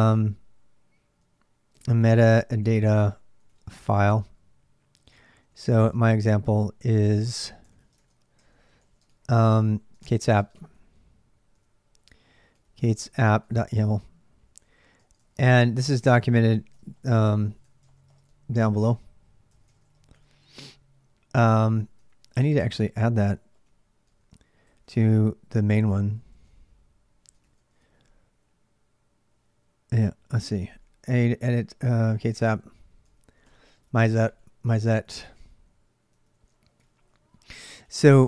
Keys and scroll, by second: 1.0-6.4 typing, 7.5 ctrl+[, 7.7-13.5 typing, 14.8-20.4 typing, 19.3 ctrl+[, 21.8 ctrl+a, 21.9-27.6 typing, 27.2 ctrl+a, 29.8 ctrl+a, 29.9 ctrl+a, 31.6-37.2 typing, 37.7 Return.